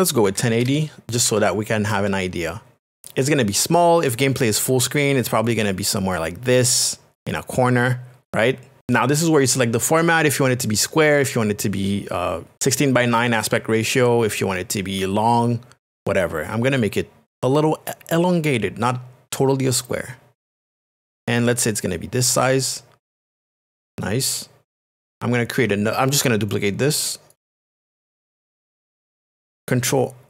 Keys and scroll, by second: 0.2 KP_1, 0.4 KP_9, 0.7 KP_0, 1.3 Tab, 2.8 Return, 17.3 shift+space.